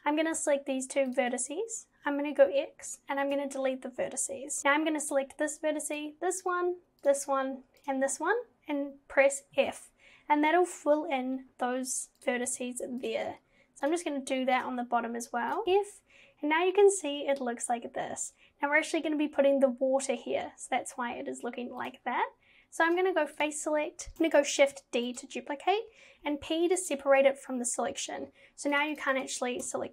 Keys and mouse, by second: 2.5 x, 5.1 click, 7.1 shift+click, 9.6 f, 13.9 shift+click, 15.7 f, 22.9 click, 24.1 shift+s, 24.6 shift+d, 26.3 p, 28.8 click, 29.0 click, 29.1 click, 29.7 Tab.